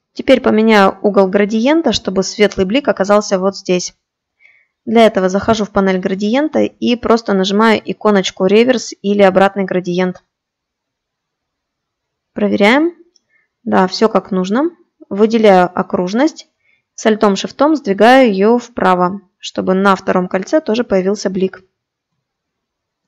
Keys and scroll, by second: 22.8 ctrl+d.